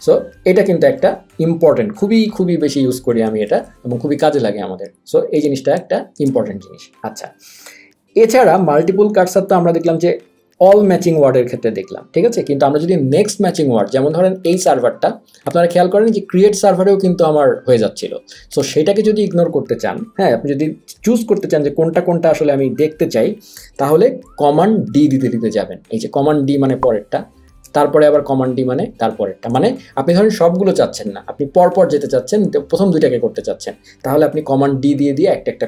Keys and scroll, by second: 3.6 super+z, 5.4 Escape, 6.2 super+s, 25.0 super+d, 27.6 super+d.